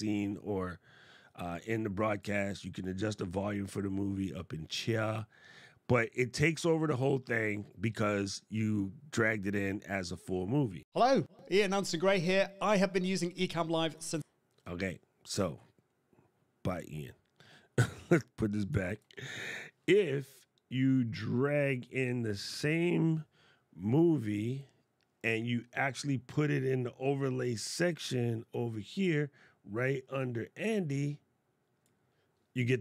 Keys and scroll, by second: 18.7 shift+super+b.